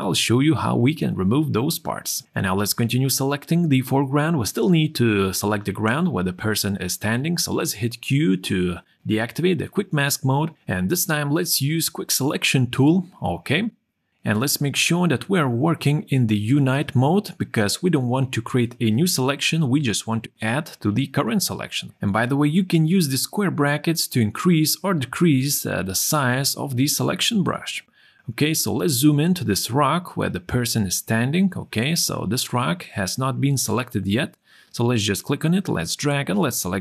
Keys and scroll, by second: 1.0 ctrl+o, 7.2 q.